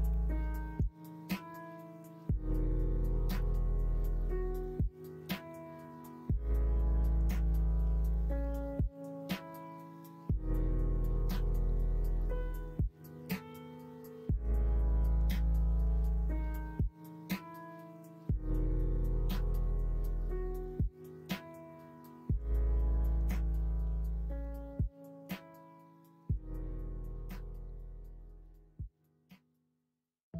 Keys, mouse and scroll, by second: 0.1 3, 3.1-9.8 drag, 9.8-10.9 middle drag, 11.1 middle click, 11.9 shift+middle click, 12.7 middle click, 14.7 ctrl+z, 16.8 middle click, 20.8-22.5 middle drag, 22.7 ctrl+z, 25.8 middle click, 28.4-29.3 scroll up 1, 29.3 scroll up 1, 29.4-30.3 middle drag.